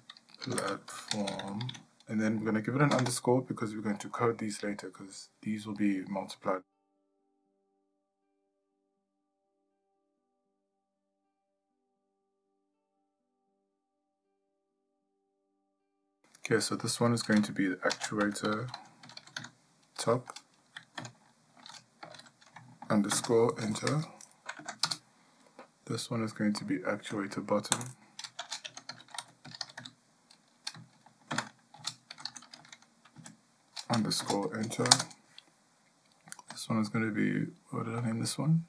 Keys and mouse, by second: 11.6 shift+middle click, 12.2 ctrl+middle click, 14.1-25.2 drag, 27.2-35.4 drag.